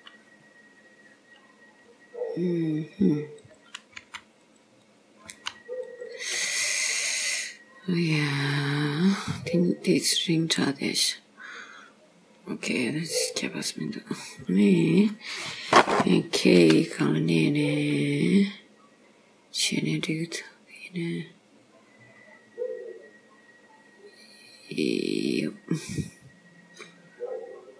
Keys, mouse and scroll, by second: 1.6 scroll down 1, 3.6 click, 4.1 g, 4.9 click, 5.4 g, 7.3-7.7 scroll down 3, 9.2 scroll up 2, 13.7 scroll up 1, 14.7 click, 16.7 k.